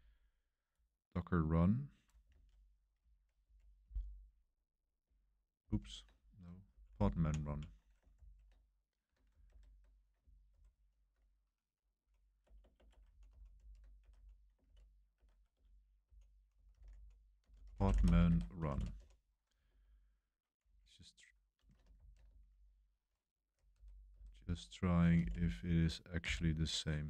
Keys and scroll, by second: 2.3 super+1, 3.4 super+v, 5.6 ctrl+c, 6.7 Up, 7.4 Up, 8.1 ctrl+c, 9.5 super+3, 10.5 super+7, 10.5 super+3, 11.9 i, 12.4 Return, 12.6 Return, 12.7 Return, 12.8 Escape, 13.0 k, 13.5 super+v, 14.0 Escape, 14.1-20.6 typing, 15.1 Escape, 19.6 super+1, 21.9 ctrl+c, 22.4 super+3, 23.5 super+6, 23.7 super+7, 24.1 super+7, 25.1 shift+v, 26.2 super+c.